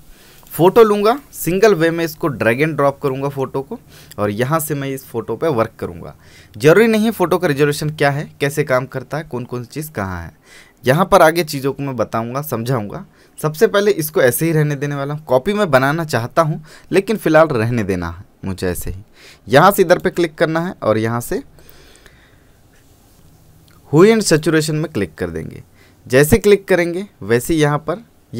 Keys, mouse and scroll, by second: 0.5-6.6 drag, 20.0 click, 24.4 click.